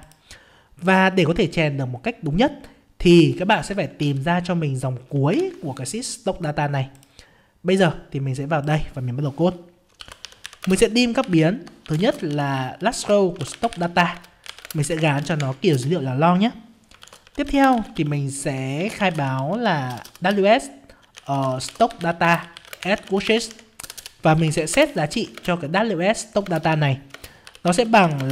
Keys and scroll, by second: 4.0 ctrl+Down, 5.3 ctrl+Up, 25.3 ctrl+space.